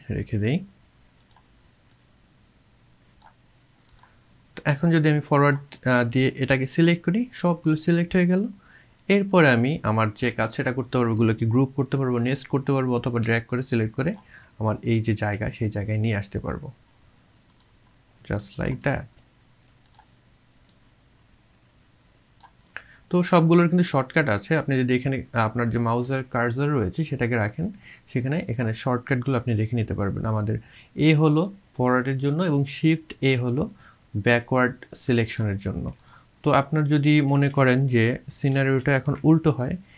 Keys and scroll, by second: 37.5 ctrl+v, 38.5 ctrl+z.